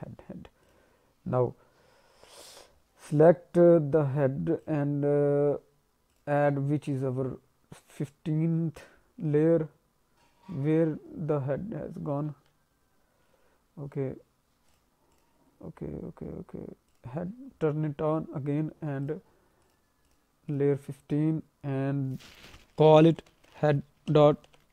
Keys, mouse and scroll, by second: 0.5 click, 2.7-3.1 scroll down 1, 4.5 click, 6.4 click, 6.9 click, 8.9-10.0 scroll down 2, 10.5 alt+middle click, 12.3 ctrl+z, 14.7 click, 15.1 click, 15.7-16.8 scroll up 4, 16.9 click, 17.5-18.1 scroll down 2, 19.0 click, 20.0 click, 20.4 click.